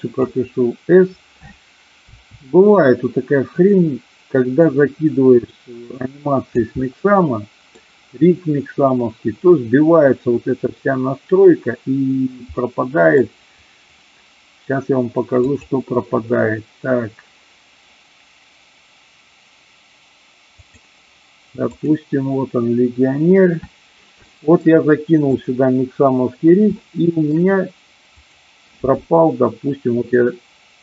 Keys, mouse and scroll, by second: 2.1 s, 3.6 click, 4.6-6.6 drag, 6.8 middle click, 12.7-13.2 middle drag, 15.4-22.3 drag, 24.3 shift+middle click, 25.2 click, 26.7 shift+middle click, 28.2 click.